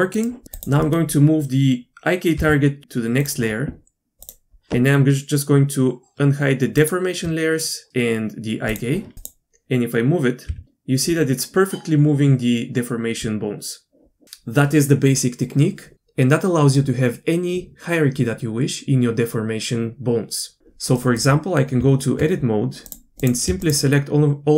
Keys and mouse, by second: 0.5-1.3 drag, 2.4 m, 4.2-7.2 drag, 8.7 shift+click, 11.1 g, 21.0-22.1 middle drag, 22.1 Tab, 22.9 click.